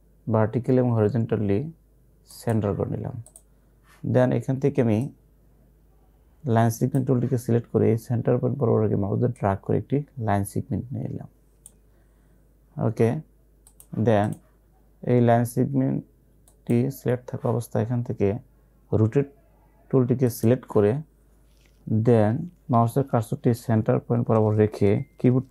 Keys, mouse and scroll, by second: 2.4-9.4 drag, 9.4-13.7 drag, 20.4 click.